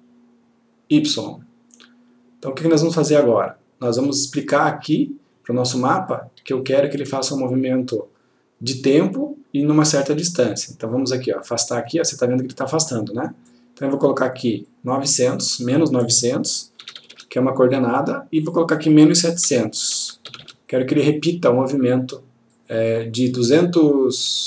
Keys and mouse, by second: 5.1 click, 11.0-13.8 click, 16.9 typing, 17.9 click, 19.6 typing, 20.8 click, 22.7-23.3 click.